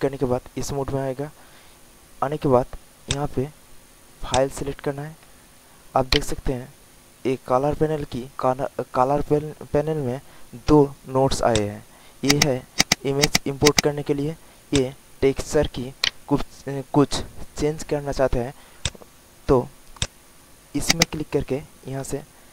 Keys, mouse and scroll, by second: 5.6 alt+middle click, 6.1 alt+right click, 9.9 alt+middle click, 10.8 alt+middle click, 11.4 click, 15.6 alt+middle click, 15.9 alt+right click, 16.8 alt+middle click, 18.7-22.5 drag.